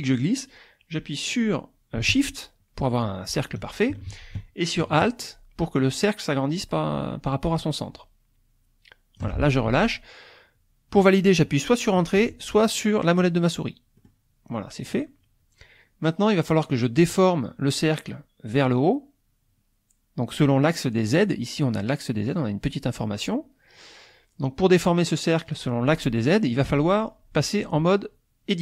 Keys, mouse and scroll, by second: 14.0 click.